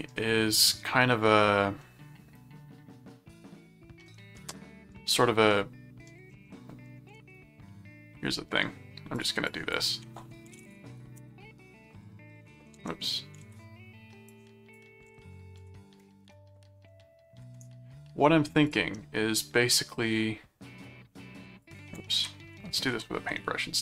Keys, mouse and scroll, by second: 1.8-4.0 middle drag, 4.3 middle click, 5.5 middle click, 7.2 shift+super+s, 9.1 click, 10.2-11.4 typing, 12.7 alt+Tab, 13.4 shift+super+s, 14.3 click, 15.2 alt+Tab, 15.6 ctrl+v, 18.7 click, 20.8 click, 22.1 ctrl+z, 22.9 ctrl+z.